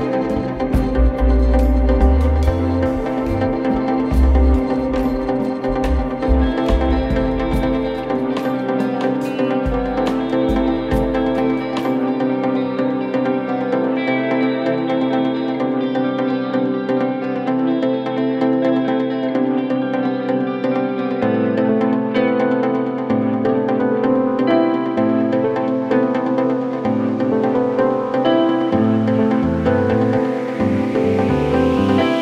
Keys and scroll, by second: 2.7 ], 3.5 4, 8.3 F1, 18.1-19.1 typing, 20.3 4, 23.1 F1, 26.6 1, 30.3 F1, 30.4 F2, 31.6 ctrl+d, 31.8 Escape.